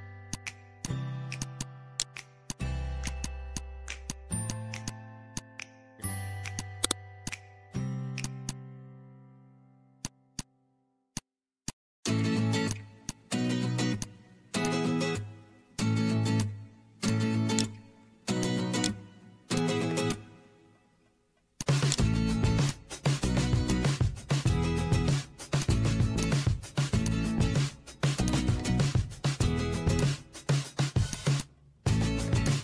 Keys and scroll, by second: 5.8 1, 5.8 3, 5.9 Return, 9.5 ctrl+a.